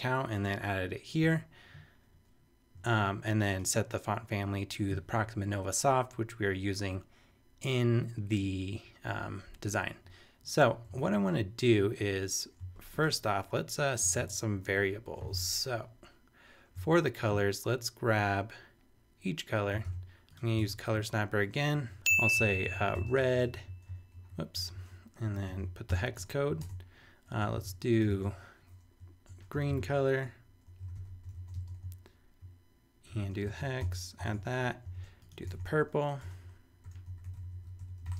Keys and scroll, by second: 11.0 super+Tab, 14.0 Return, 14.7 shift+Return, 15.4 shift+super+Tab, 16.2 super+Tab, 19.8 shift+super+e, 20.6 shift+super+Tab, 29.3-31.9 typing, 32.5 super+space, 33.2 shift+super+3, 33.4 shift+super+v, 33.8 super+;, 34.3 super+Tab, 34.9 shift+super+Tab, 34.9 shift+super+e, 35.5 shift+super+Tab, 36.0 super+Tab, 36.2 super+Return, 36.6-38.1 typing.